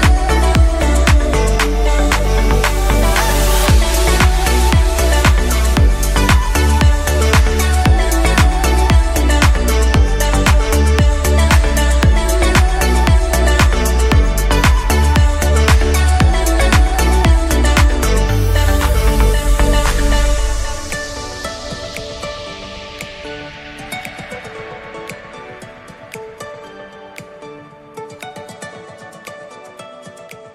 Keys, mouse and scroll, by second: 3.8-5.1 drag, 7.2 Tab, 7.9-9.5 middle drag, 9.5 Tab, 10.2 a, 10.6 g, 12.5-13.5 middle drag, 13.5-16.4 scroll up 1, 16.4 shift+d, 19.6-20.7 middle drag, 20.7 s, 22.7 g, 27.4-30.1 middle drag, 30.1-30.5 drag.